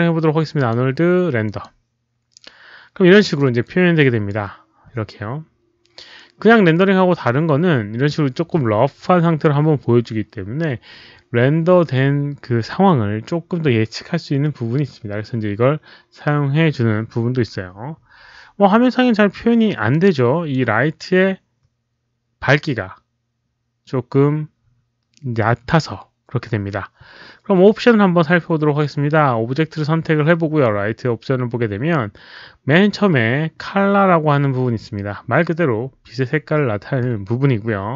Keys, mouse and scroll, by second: 0.5 alt+click, 1.4 alt+click, 1.9-2.6 typing, 2.1 alt+click, 2.1 alt+right click, 3.6-4.2 drag, 4.4 q, 8.7 click, 11.7 click, 12.5 click, 19.9-20.5 drag, 31.7 scroll up 1.